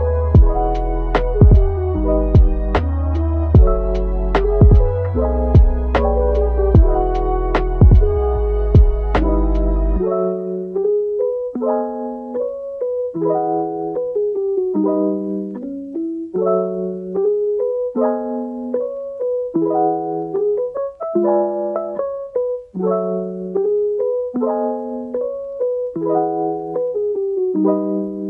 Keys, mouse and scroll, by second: 13.3 typing, 14.0 middle click, 14.9 Tab, 15.9 alt+click, 17.3 double click, 17.6 Tab, 18.0 middle click, 19.5 scroll down 1, 20.3 /, 21.8 typing, 21.9 shift+click, 22.4 shift+click, 23.2 ctrl+l, 28.0 ctrl+z.